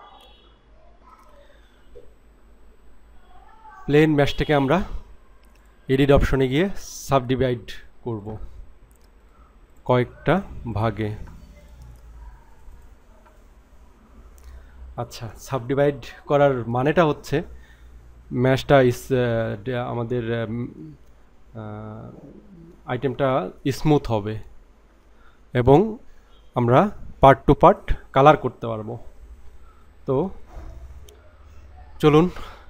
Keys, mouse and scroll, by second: 5.6-6.7 drag, 8.2 right click, 9.7-10.5 right drag, 10.7-12.7 right drag, 12.8 right click.